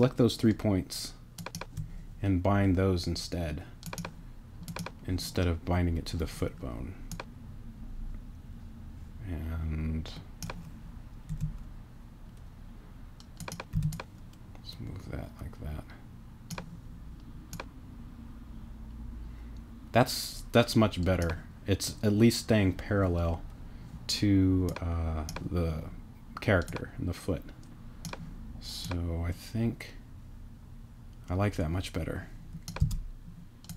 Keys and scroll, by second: 11.3 t, 13.7 t, 32.8 space.